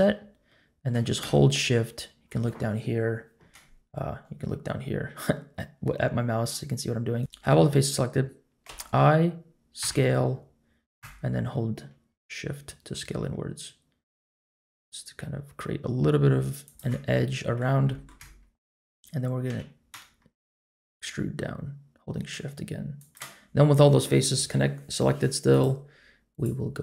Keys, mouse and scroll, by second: 7.2 ctrl+z, 7.2 middle click, 7.2 shift+click, 8.6 i, 17.0 middle click, 17.9 shift+middle click, 18.2 middle click, 19.5 e, 25.5 click, 26.3-26.8 drag.